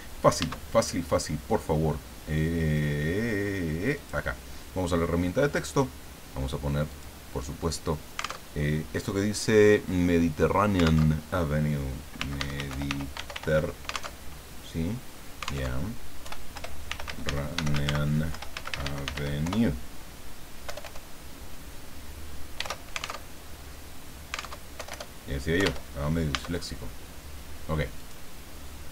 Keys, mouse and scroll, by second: 3.9 click, 6.9 click, 8.5 alt+Tab, 11.1 alt+Tab, 11.9-13.8 typing, 14.2 alt+Tab, 15.7 alt+Tab, 16.2-20.7 typing, 16.5 Return, 22.3-23.2 typing, 23.2 alt+Tab, 24.6 alt+Tab, 24.7 alt+BackSpace, 25.3-26.1 typing, 28.0 click.